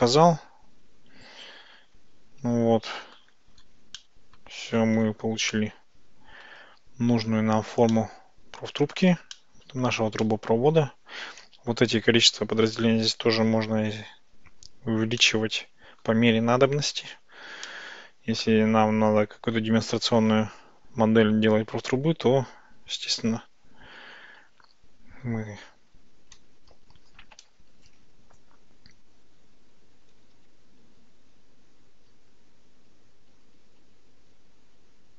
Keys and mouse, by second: 4.0-4.5 middle drag, 5.6-6.5 shift+middle drag, 8.0-9.0 middle drag, 9.4-9.9 shift+middle drag, 10.3-11.8 middle drag, 15.2 middle click, 17.7-19.6 middle drag, 20.7 ctrl+z, 27.5 Tab, 30.4 ctrl+z, 33.0-35.1 ctrl+z.